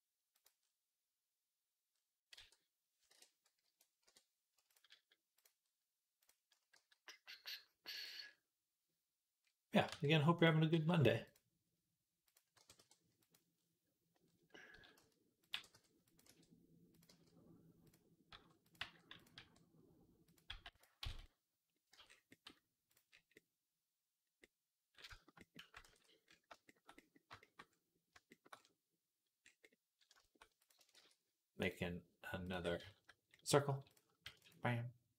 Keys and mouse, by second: 2.2 r, 4.6 click, 5.3 middle click, 6.6 g, 8.1-32.3 middle drag, 9.7 r, 10.6 g, 12.1 click, 12.4 g, 14.6 s, 15.4 g, 16.1 r, 16.9 g, 18.2 r, 18.6 g, 19.2 r, 20.3 g, 20.9 z, 21.8 Tab, 22.7 click, 25.7 ctrl+s, 30.8 shift+a, 32.3 click, 32.4-33.7 shift+middle drag, 33.7 click, 33.8-35.1 shift+middle drag, 34.1 shift+d.